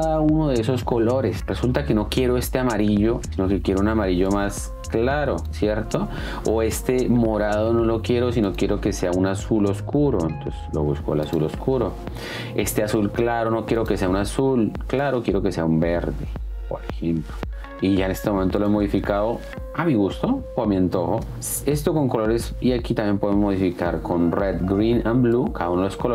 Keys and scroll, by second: 19.2 space.